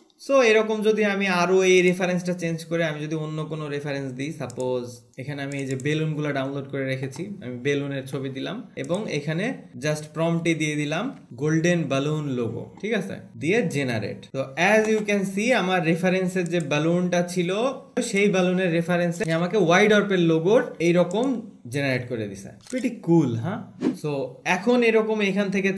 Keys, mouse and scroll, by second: 2.2 click, 4.9 click, 5.1 scroll, 7.5 click, 9.2 click.